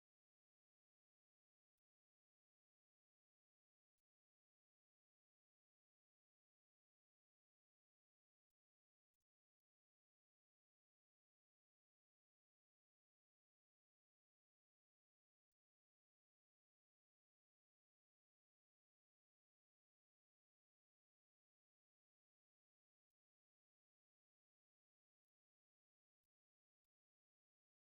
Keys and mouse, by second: 0.1 ctrl+z, 0.6 middle click, 1.5 shift+middle click, 1.9 middle click, 2.7 ctrl+r, 3.7 ctrl+r, 4.3 middle click, 5.0 ctrl+middle click, 5.4 shift+middle click, 5.8 middle click, 6.5 middle click, 8.0 ctrl+r, 15.6 middle click, 16.1 middle click, 16.9 middle click, 18.5 ctrl+Tab, 19.3 ctrl+Tab, 21.6 Tab, 22.8 1, 23.7 middle click, 26.4 ctrl+KP_Add.